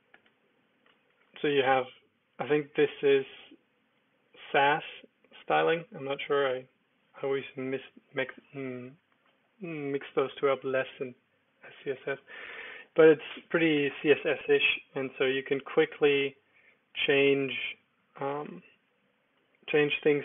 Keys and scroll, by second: 0.0-0.8 typing, 1.2 ctrl+d, 1.6 ctrl+d, 5.5 ctrl+d, 9.2 Escape, 12.5 g, 12.6 g, 15.9-18.9 typing.